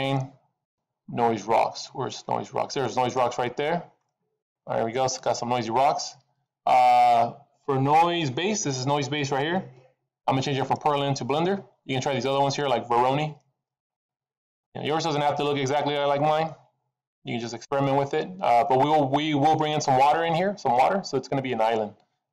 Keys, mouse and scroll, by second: 2.3 click, 4.0 middle click, 4.5-5.7 scroll up 3, 10.4 click, 13.7 click, 15.5 middle click, 17.5 click, 21.5 click.